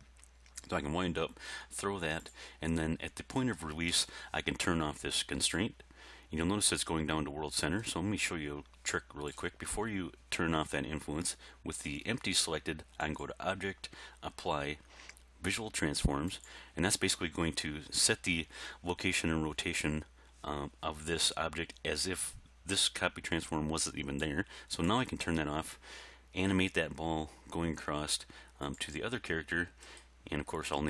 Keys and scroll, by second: 26.5 g.